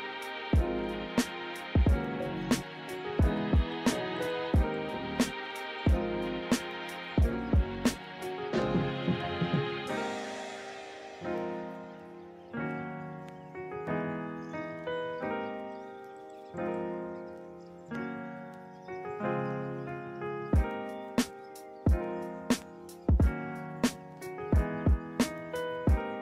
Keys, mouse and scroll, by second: 7.3 ctrl+-, 8.5 ctrl+=, 13.4 right click, 17.6 ctrl+z, 22.3 ctrl+z.